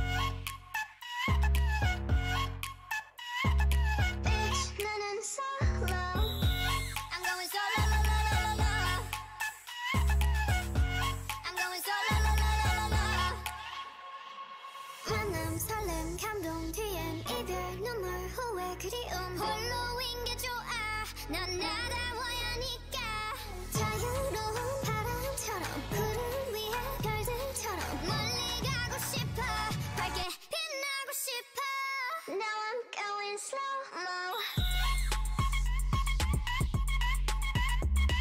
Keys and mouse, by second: 1.8 g, 3.4 s, 6.0 g, 7.1 g, 9.2 shift+l, 9.7 g, 10.7 a, 10.9 a, 12.1 r, 14.0 g, 15.5 s, 16.3 g, 17.1 s, 17.8 g, 19.6 s, 20.7 g, 22.5 s, 23.7 g, 25.9 g, 27.9 g, 28.6 a, 28.9 l, 29.4 g, 32.5 a, 32.7 a, 33.2 g, 36.2 Tab, 36.8 middle click, 37.7 middle click, 37.7 t.